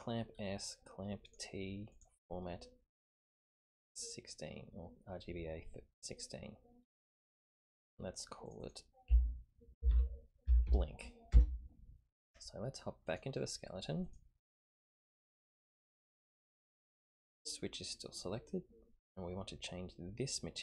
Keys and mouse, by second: 1.3 click, 1.9-3.9 drag, 8.5-12.2 drag, 13.1 click, 14.2-15.1 drag, 16.8 click.